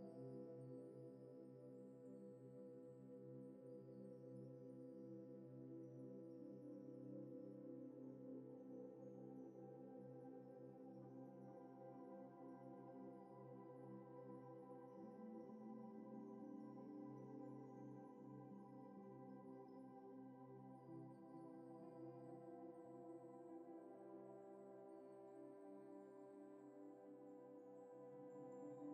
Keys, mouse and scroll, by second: 10.6 alt+Tab, 10.9 alt+Tab, 11.0 alt+Tab, 11.1 alt+Tab, 14.8-15.3 typing, 15.7 right click, 18.7 alt+Tab, 18.9 alt+Tab.